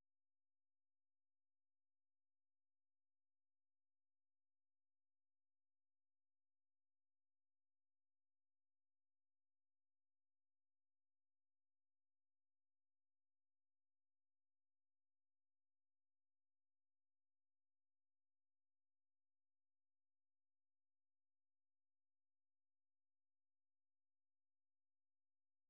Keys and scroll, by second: 7.0 typing, 10.8-13.6 typing, 14.9-15.8 typing, 16.2 Tab.